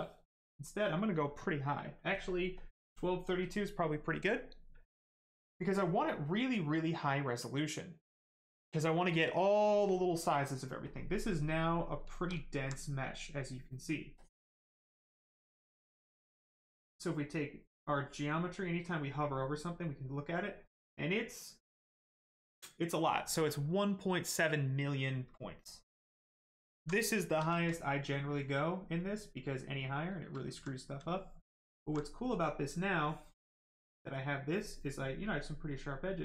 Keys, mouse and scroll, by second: 0.4 click, 11.3 right click, 12.4 alt+right click, 12.7 right click, 12.8 right click, 14.1 click, 17.8 click, 24.2 right click, 26.0 shift+right click, 26.4 alt+right click, 27.0 shift+right click, 27.3 shift+f, 27.9 right click, 28.0 right click, 30.4 alt+right click, 31.9 right click, 32.0 right click, 33.0 click, 35.6 click.